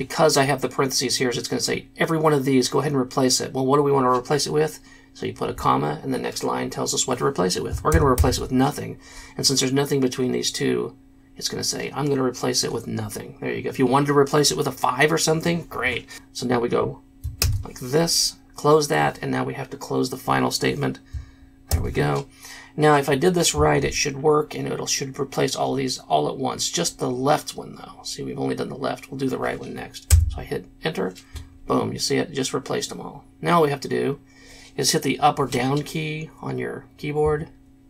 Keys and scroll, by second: 7.9 shift+', 8.1 shift+', 17.4 shift+0, 21.7 shift+], 30.3 Return, 37.4 Down.